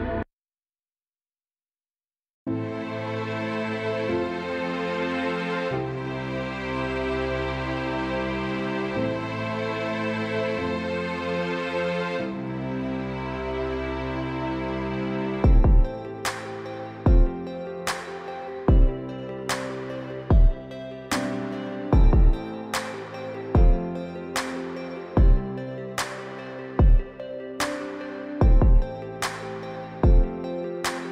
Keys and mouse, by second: 1.7 click, 5.4-6.0 drag, 6.9 click, 7.5 click, 7.9-9.0 drag, 9.5-10.7 drag, 14.0 click, 14.2-15.9 drag, 21.6-22.9 drag, 26.2 click, 26.8-28.5 drag, 28.6-30.6 drag.